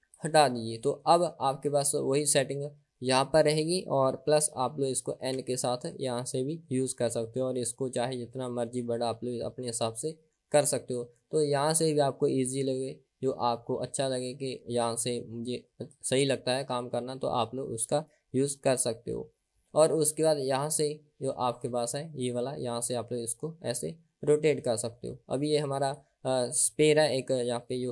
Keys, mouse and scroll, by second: 0.4 click, 5.5 n, 7.7 click, 7.7 n, 10.7 click, 19.8 n, 23.0 n, 23.1 click, 26.1 click.